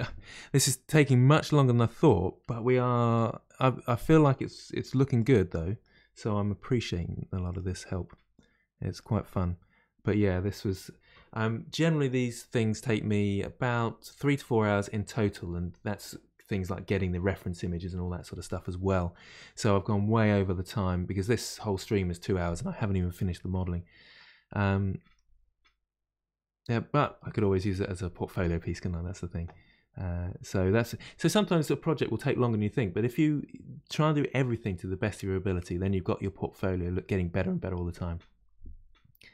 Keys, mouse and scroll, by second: 0.5-4.8 middle drag, 4.8 1, 5.2 click, 5.5-6.6 middle drag, 6.6 g, 7.8-9.4 middle drag, 9.4-12.4 scroll down 1.